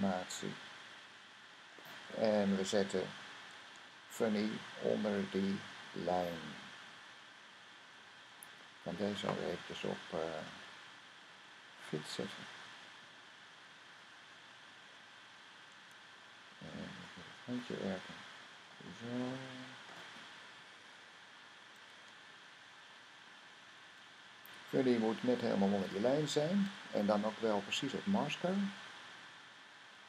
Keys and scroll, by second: 4.2-4.7 typing, 4.9 Down, 5.3 Down, 6.2 Down, 6.7 typing, 7.1 Down, 7.4 Down, 7.6 Down, 10.1 typing, 24.1 Down, 24.5 Down, 25.0 Down, 25.5 Down, 26.9 Down, 27.2 Down, 27.5-29.8 Down.